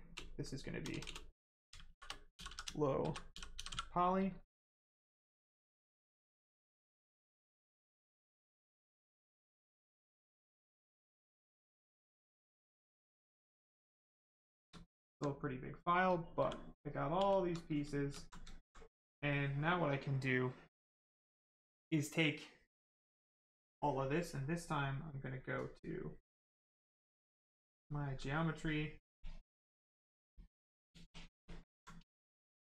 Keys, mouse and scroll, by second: 3.6 y, 4.6 click, 13.6 right click, 17.1 shift+f, 17.5 right click, 19.6 click, 23.6 click, 28.9 click, 31.6 alt+right click.